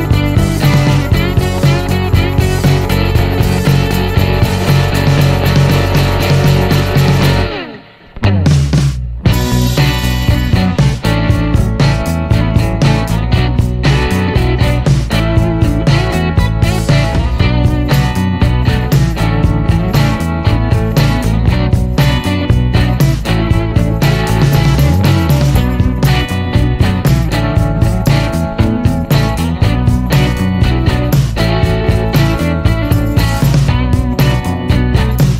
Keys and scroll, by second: 0.0 Left, 0.2 Left, 0.4 Left, 0.5 Left, 2.0 BackSpace, 5.0 Return, 5.9-7.5 typing, 7.8 Return, 23.4-30.3 typing, 30.5 Return, 32.3 typing.